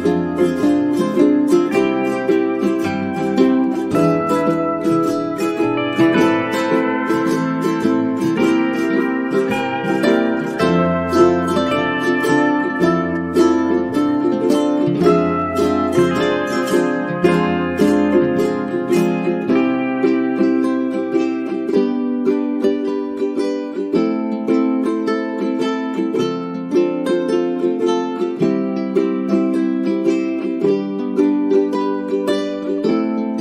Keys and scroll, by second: 13.0 space, 18.7 space, 23.4 F9.